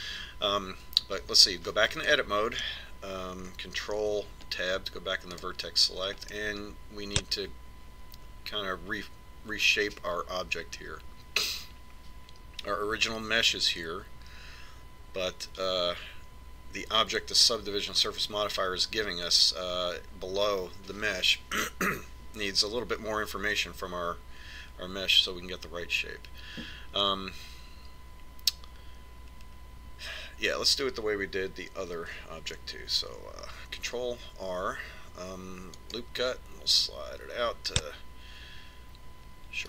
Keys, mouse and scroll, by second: 2.6 Tab, 3.8-5.7 middle drag, 5.7 ctrl+Tab, 8.0-10.0 middle drag, 35.4 ctrl+r.